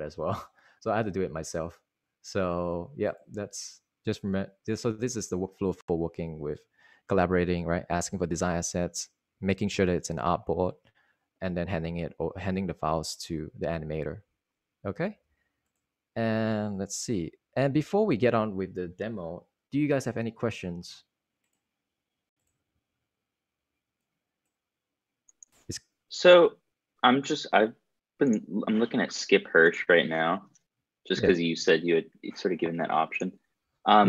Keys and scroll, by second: 15.8 super+Right, 16.8 super+Right, 17.6 Right.